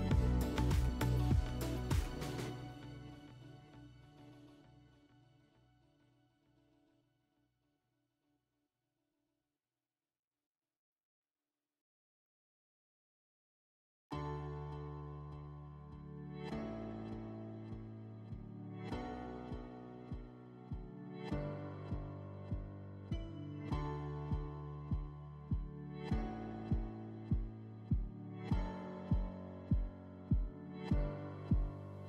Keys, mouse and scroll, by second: 6.2 click, 8.3 click, 9.5 click, 20.7 click, 22.8 click, 27.0 click.